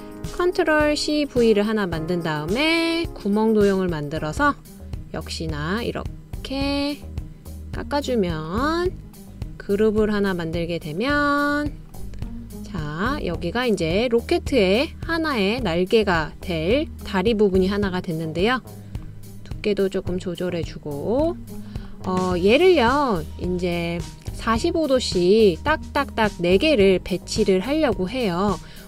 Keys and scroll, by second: 1.4 super+c, 1.8 super+v.